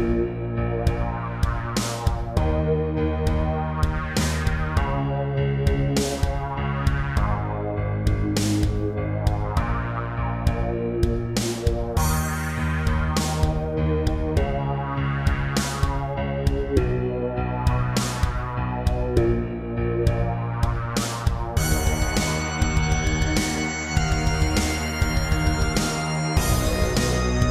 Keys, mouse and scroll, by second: 0.8 b, 0.9 click, 1.9-2.7 typing, 4.0 click, 4.1 double click, 4.9-5.3 typing, 5.9 click, 7.1-8.6 typing, 9.2 click, 9.5 scroll down 3, 9.7 middle click, 11.3 shift+middle click, 11.7 1, 12.3 scroll up 2, 12.6 shift+middle click, 13.4 a, 13.8 scroll up 3, 14.1 shift+middle click, 15.0 b, 15.1 click, 16.3 scroll down 1, 17.3 click, 18.2-19.2 typing, 20.5 click, 20.8-21.2 scroll down 3, 21.3 middle click, 22.9 3, 23.5 scroll up 2, 23.8 shift+middle click, 24.7 scroll down 2, 26.7-27.0 scroll down 3, 27.3 Tab.